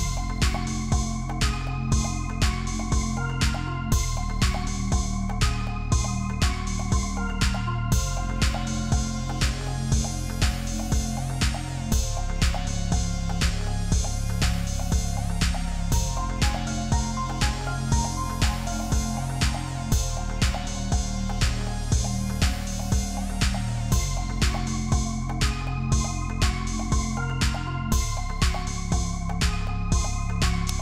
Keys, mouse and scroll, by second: 0.5 ctrl+t, 2.0 Return, 2.7 alt+scroll down 1, 3.4 Down, 3.6 Down, 4.0 Left, 4.1 Up, 5.0 double click, 6.8 double click, 9.1 double click, 10.8 shift+click, 11.9 ctrl+z, 13.6 Return, 17.0 right click, 24.3 double click, 26.3 double click.